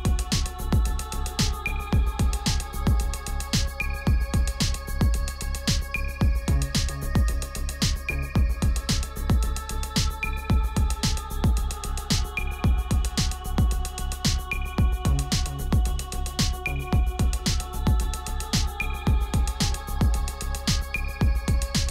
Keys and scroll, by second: 5.2 Return, 6.2 Return, 8.7 F10, 8.7 ctrl+z, 8.8 F10, 14.3 ctrl+alt+shift+e.